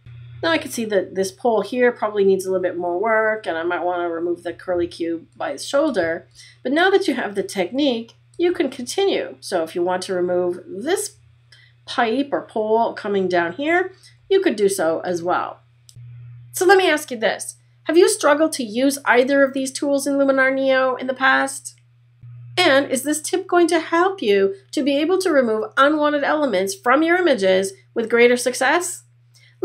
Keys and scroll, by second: 4.6 space, 8.4 space.